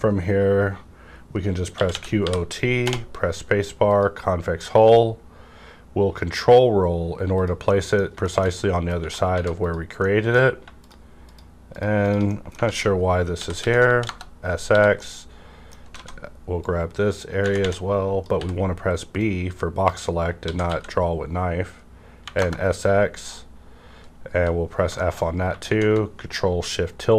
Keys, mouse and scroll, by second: 1.7-2.8 typing, 1.8 middle click, 3.9 click, 5.0 ctrl+scroll down 1, 7.7 middle click, 7.8 scroll down 1, 8.6 shift+middle click, 8.9 scroll down 1, 9.0 Right, 9.2 3, 9.6 click, 10.0 middle click, 10.0 middle click, 10.5 scroll up 1, 10.7 click, 11.3 shift+click, 12.3 middle click, 12.6 alt+z, 13.3-14.6 typing, 13.9 KP_Enter, 14.9-16.5 middle drag, 16.0 alt+a, 16.5-19.2 drag, 18.3 b, 19.2-20.7 drag, 20.4 typing, 20.7-22.2 drag, 22.2 KP_0, 22.4 KP_Enter, 23.2 KP_Enter, 23.2 scroll up 1, 24.2 f, 24.7-25.0 scroll down 2, 25.0 shift+middle click, 25.3 scroll up 1, 25.8 shift+Right, 25.8-27.1 scroll up 1.